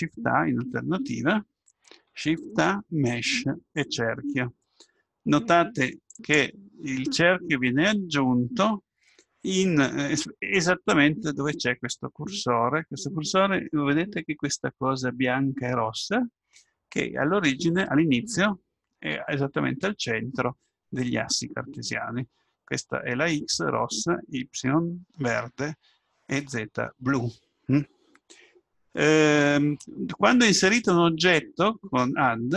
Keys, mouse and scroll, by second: 1.9 shift+a, 31.3 click, 32.2 click.